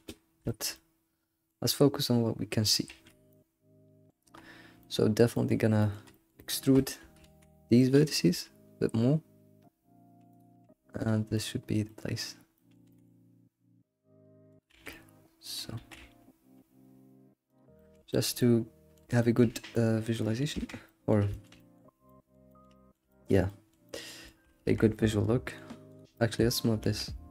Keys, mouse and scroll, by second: 0.5-1.7 shift+middle drag, 1.7-2.0 scroll up 3, 2.0 middle click, 2.9 alt+x, 3.3-6.4 middle drag, 6.7 shift+middle click, 7.2 alt+x, 8.3 e, 10.6 s, 11.9 middle click, 12.9 g, 14.7 alt+x, 14.9 middle click, 15.8 alt+s, 17.7-20.7 middle drag, 20.7 Tab, 20.9-24.7 middle drag, 24.7 Tab, 24.9-26.0 middle drag, 26.0 click, 26.1 middle click, 26.8 g.